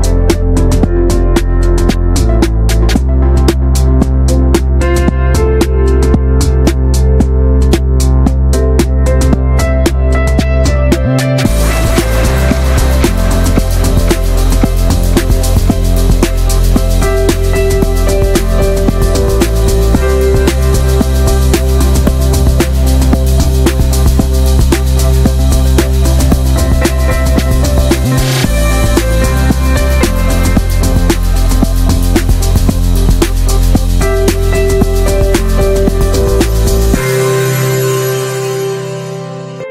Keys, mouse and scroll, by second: 1.6 alt+z, 2.3 middle click, 2.6 ctrl+s, 2.9 click, 3.2 alt+middle click, 3.4 shift+middle click, 3.8 click, 4.3 alt+middle click, 4.6 scroll down 1, 4.7 shift+middle click, 5.0 ctrl+s, 5.4-7.0 drag, 7.0 e, 7.5 click, 8.7 r, 9.3 click, 10.5 shift+middle click, 10.8 ctrl+s, 11.0-11.6 shift+middle drag, 11.6 click, 12.5 shift+right click, 13.4 click, 15.4 shift+right click, 16.0 click, 20.3 click, 21.0 KP_Subtract, 21.3-22.3 drag, 23.4 click, 23.7 shift+middle click, 24.1-24.6 drag, 24.9-25.3 scroll down 6, 25.1 alt+z, 25.3 middle drag, 25.5 Tab, 25.7 alt+z, 25.9 middle drag, 26.0 drag, 26.1 scroll down 2, 26.3 middle click, 26.6 click, 26.7 scroll up 2, 26.9-27.5 middle drag, 27.5-28.4 scroll up 2, 27.7 middle drag, 28.4 Tab, 28.6 alt+middle click, 28.8 alt+middle click, 28.8 alt+z, 29.1 click, 29.7-30.3 scroll up 2, 30.3-32.3 drag, 32.3-33.0 scroll up 2, 32.5-32.8 shift+middle drag, 33.0 shift+middle click, 33.6-34.1 drag, 34.1 2, 34.6 shift+middle click, 34.7 shift+scroll up 1, 34.9 r, 35.9 click, 36.4 s, 36.9-37.4 scroll down 4, 37.1 shift+middle click, 37.4 alt+z, 37.7-38.2 shift+middle drag, 38.2 Tab, 38.3 drag, 38.4 middle click, 38.6 Tab, 38.8 alt+middle click, 39.1 alt+z, 39.4 click.